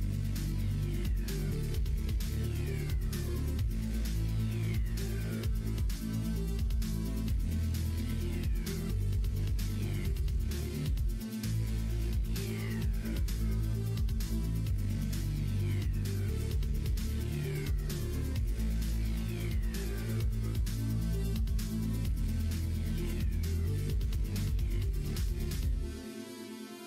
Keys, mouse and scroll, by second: 5.9 click, 6.9 click, 7.8 middle click, 8.3 shift+middle click, 8.8 middle click, 9.3 click, 10.5 ctrl+s.